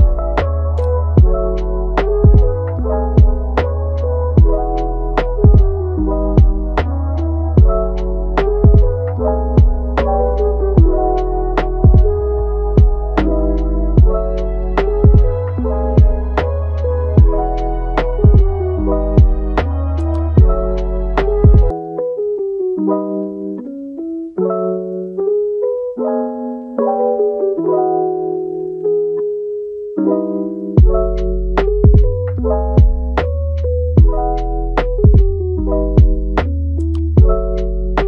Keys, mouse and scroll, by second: 3.0 scroll up 1, 3.1-5.6 middle drag, 5.6 scroll down 1, 5.9-8.9 middle drag, 10.1 click, 16.4 scroll up 1, 16.5-17.9 middle drag, 17.9-18.2 scroll down 1, 18.2-18.7 middle drag, 18.7-19.2 scroll up 1, 19.2 click, 20.3 click, 20.7 click, 21.9-22.8 drag, 22.8 scroll up 1, 23.1 middle click, 23.9-24.4 scroll down 1, 24.4 middle click, 25.3-27.9 drag, 27.9 scroll down 2, 28.1 middle click, 28.9 scroll down 1, 29.1 middle click, 30.0 scroll up 2, 30.2-31.8 middle drag, 31.8-34.0 drag, 34.0 middle click, 34.7 click, 35.2-36.7 middle drag, 36.7 scroll up 1, 37.0 middle click, 37.8 click.